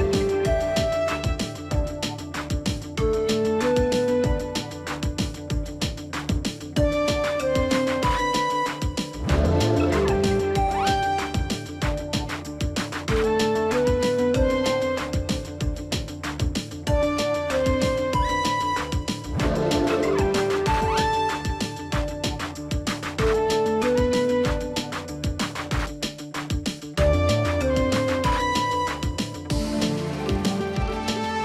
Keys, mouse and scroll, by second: 0.7 ctrl+click, 2.5 ctrl+t, 3.6 alt+click, 10.4 right click, 13.6 double click, 18.5 ctrl+t, 21.4 shift+click.